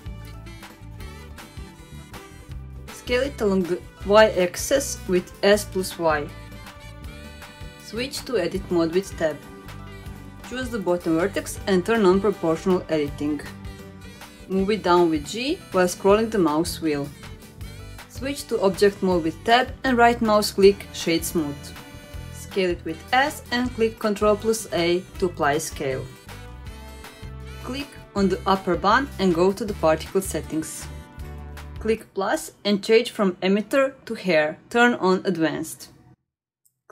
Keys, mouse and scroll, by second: 1.7-2.0 scroll down 2, 2.0 shift+middle click, 2.6 g, 3.6 shift+middle click, 4.6 shift+middle drag, 5.0-5.3 scroll up 1, 5.3 s, 7.5-8.1 middle drag, 8.4 Tab, 8.7 scroll up 1, 8.7 middle click, 9.1 shift+middle click, 9.5-9.8 scroll up 2, 9.8 middle click, 11.2 click, 12.9 click, 13.3 middle click, 13.7-14.1 scroll down 2, 14.2 g, 18.0 Tab, 19.4 right click, 21.4-21.9 middle drag, 22.4 s, 24.0 ctrl+a, 24.8-25.2 shift+middle drag, 25.4 click, 25.9-26.2 scroll up 2, 26.2 middle click, 27.0 click, 27.4 shift+middle drag, 29.6 click, 31.2 click, 32.3 click, 34.1 click, 36.1-36.8 scroll down 2, 36.8 click.